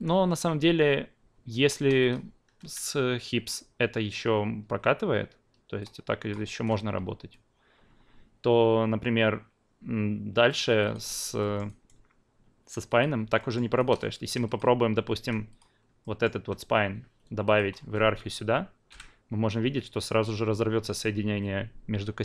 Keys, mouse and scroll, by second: 1.7 alt+right drag, 2.0 alt+click, 5.8-6.3 drag, 6.4 ctrl+z, 10.5 click, 10.8 drag, 11.4 alt+middle drag, 11.8 alt+right click, 13.0 click, 13.4 alt+middle drag, 13.8 alt+right click, 14.5-16.0 drag, 16.0 alt+middle click, 17.4-18.9 shift+drag, 18.9 p.